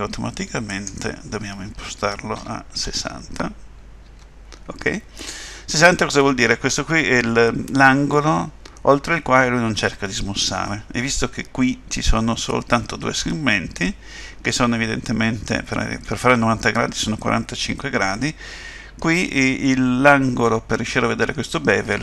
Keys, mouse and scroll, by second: 0.7 click.